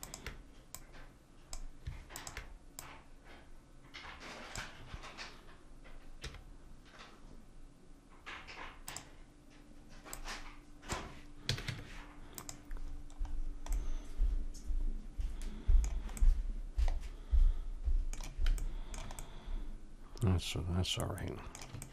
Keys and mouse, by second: 6.2 s, 10.1-11.7 drag, 11.5 a, 11.7 Tab, 12.8-15.9 middle drag, 16.2-21.0 middle drag, 21.8-21.9 middle drag.